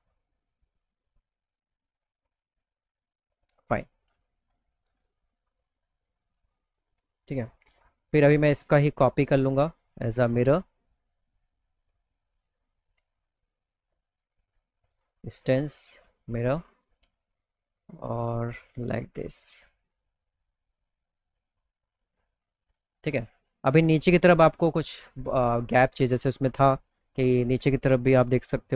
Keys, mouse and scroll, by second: 2.4 click, 3.0 click, 3.3 middle click, 3.5 alt+middle click, 4.0 middle click, 4.6 click, 5.4 click, 5.7 middle click, 5.9 middle click, 6.3 middle click, 6.5 alt+middle click, 7.4 middle click, 7.7 middle click, 8.1 click, 8.6 middle click, 8.9 middle click, 9.1 alt+middle click, 9.6 middle click, 10.3-12.3 shift+drag, 13.2 click, 13.7 click, 14.3 click, 15.3 click, 16.3 click, 16.7 middle click, 17.6-20.1 drag, 21.6 click, 22.0 middle click, 22.2 alt+middle click, 22.7 middle click, 22.9 middle click, 23.3 middle click, 24.6 click, 25.5-27.2 alt+middle drag, 27.7 click.